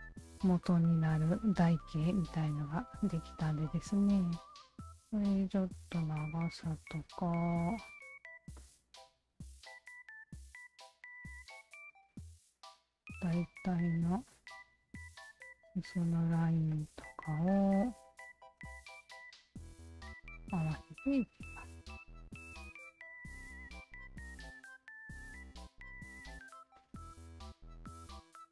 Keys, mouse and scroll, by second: 0.1 alt+click, 1.1-3.8 alt+drag, 1.1 1, 4.4 w, 4.9 alt+right click, 6.0-7.4 alt+drag, 7.8 r, 8.5-10.0 drag, 10.2-12.4 alt+drag, 12.8 w, 13.6 alt+click, 14.6 alt+click, 15.6 alt+click, 16.7 alt+click, 17.7 alt+click, 18.6-19.7 alt+drag, 20.2 e, 21.2-22.2 alt+drag, 23.5 click, 23.5 w, 24.6 alt+click, 25.3-26.5 alt+drag, 26.7 alt+click, 27.7 alt+click.